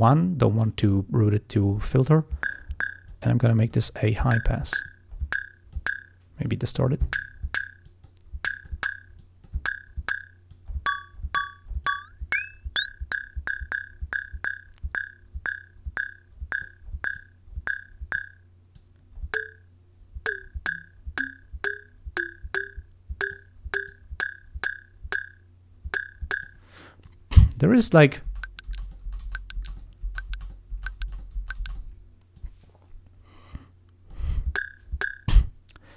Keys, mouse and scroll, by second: 3.2 click, 4.9-6.0 drag, 6.5 click, 7.9 click, 8.5 click, 9.3 click, 10.6-11.6 drag, 11.9 click, 15.9-16.9 drag, 17.2-18.4 drag, 18.8 click, 23.9-26.8 drag, 27.1 click, 28.1 click, 28.7 space, 28.9 click, 29.7 click, 30.5 click, 31.1 click, 31.7 click, 32.4 click, 33.6 click.